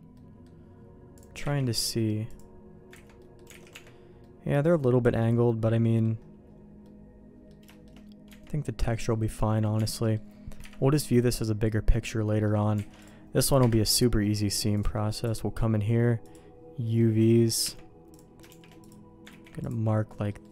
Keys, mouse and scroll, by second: 0.1 middle click, 1.1 click, 1.5 ctrl+e, 3.0 ctrl+z, 3.1 middle click, 3.5 alt+a, 3.7 Tab, 4.1 middle click, 5.1 middle click, 6.8 middle click, 7.6 shift+middle click, 8.2 Tab, 8.6 middle click, 9.7 Tab, 10.0 middle click, 10.6 KP_Divide, 12.0 middle click, 12.4 middle click, 12.8 alt+a, 13.0 click, 13.6 KP_Divide, 15.4 click, 16.8 middle click, 17.6 Tab, 18.1 click, 18.4 shift+g, 19.2 ctrl+e, 20.0 middle click, 20.4 middle click.